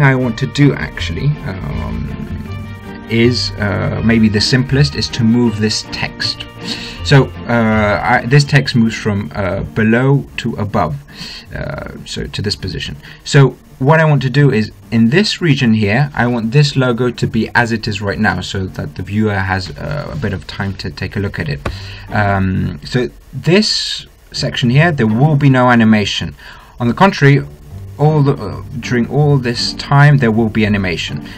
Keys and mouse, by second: 15.2-17.0 drag, 17.0 middle click.